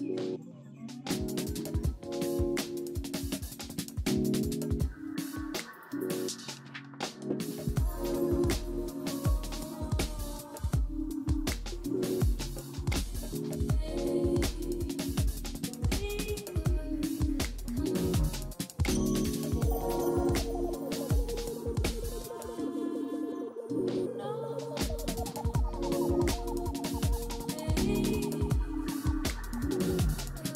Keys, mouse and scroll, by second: 0.1 alt+w, 1.0 alt+w, 12.6 Escape, 21.8-22.5 scroll up 3, 22.6 scroll down 3.